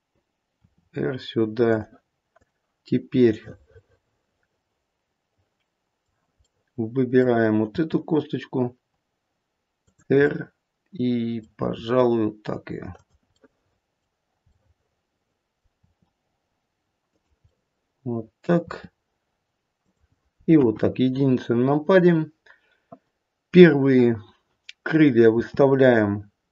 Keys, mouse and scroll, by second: 0.6 r, 2.3 click, 3.2 middle click, 6.5 middle click, 7.6 r, 10.2 middle click, 10.6 middle click, 11.6 r, 13.3 middle click, 14.5 middle click, 15.8 r, 17.5 middle click, 18.5 r, 20.5 KP_1, 21.5-23.5 scroll down 1, 23.5-24.6 scroll down 1, 25.4 r.